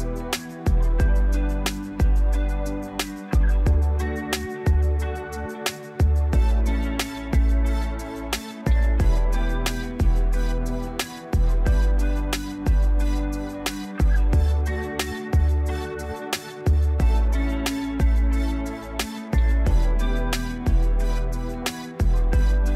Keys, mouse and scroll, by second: 18.7 6.